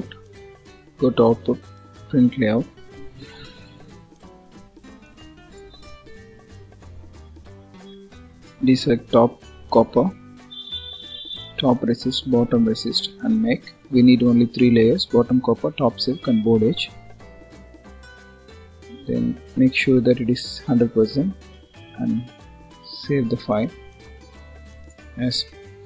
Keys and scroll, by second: 25.7 BackSpace.